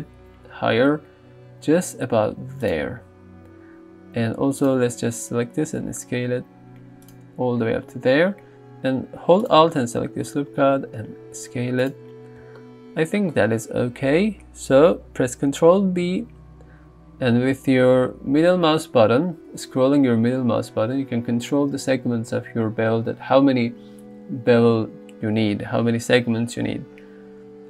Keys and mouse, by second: 2.7 click, 5.5 s, 7.1-8.4 drag, 10.2 s, 11.8 click, 16.0 ctrl+b.